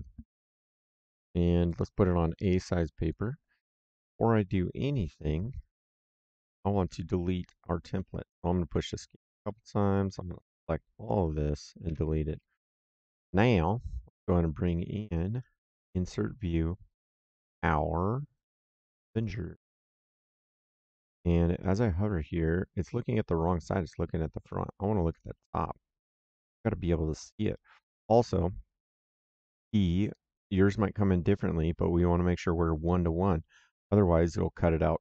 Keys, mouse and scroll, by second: 1.6 click, 3.0 click, 7.9 middle click, 8.5 Escape, 9.8 middle click, 10.4 click, 11.8 Delete, 13.4 middle click, 15.2 click, 16.9 click, 19.1 click, 24.3 click, 30.4 click.